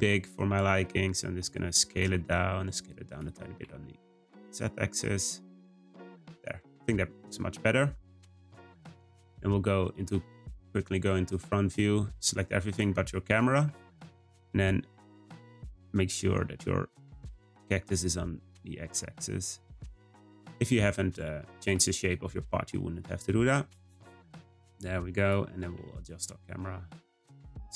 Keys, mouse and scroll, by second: 0.4 s, 1.8 s, 3.2 Tab, 3.5 g, 5.7 click, 6.1-9.2 scroll down 1, 11.3 click, 12.0-12.6 middle drag, 12.6 ctrl+click, 14.2-15.3 scroll up 5, 15.3 g, 20.1-20.8 scroll down 2, 20.8-22.6 scroll down 1, 24.7 drag, 25.2 click, 25.6 g.